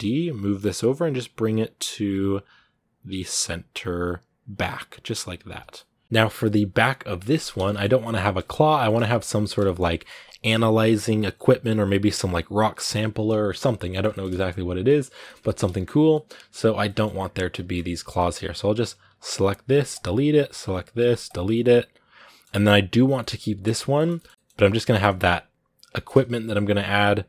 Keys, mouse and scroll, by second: 5.5-8.1 middle drag, 8.1-8.6 scroll up 1, 8.6 shift+middle click, 9.0 scroll up 1, 9.2-18.8 shift+middle drag, 18.8 right click, 19.8 x, 20.3 right click, 21.1 x, 21.3-22.5 middle drag, 22.5 right click, 23.0 middle click, 23.2 g, 23.7 shift+middle click, 24.1 scroll up 1, 24.3-27.2 middle drag.